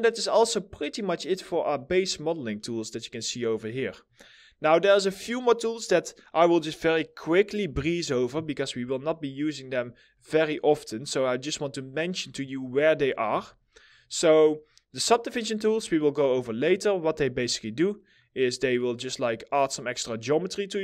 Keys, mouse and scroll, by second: 2.2 middle click, 8.6 scroll down 1, 9.0 middle click, 13.2 alt+middle click, 13.9-16.0 scroll up 1, 16.5 middle click, 20.4 double click.